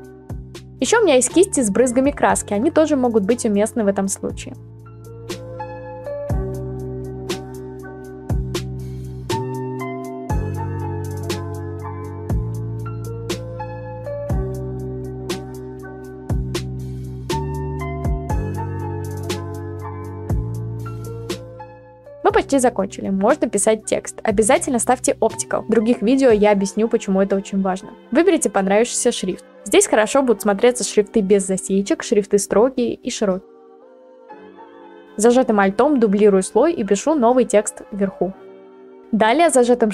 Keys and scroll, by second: 1.1 ctrl+z, 1.8-2.3 ], 2.5-3.3 ], 4.6 ctrl+z, 17.3-20.3 typing, 25.4 0, 25.5 Return, 31.0 ctrl+t, 37.1-38.3 typing.